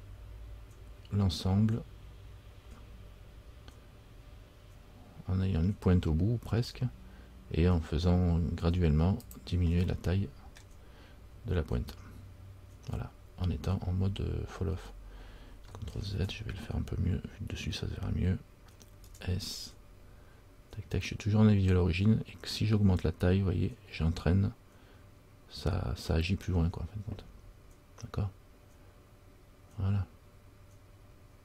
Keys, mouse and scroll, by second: 10.0 scroll up 1, 10.1 middle click, 10.7-13.1 scroll down 1, 13.2 scroll down 1, 16.2 ctrl+z, 16.2-17.2 scroll down 1, 19.2 s.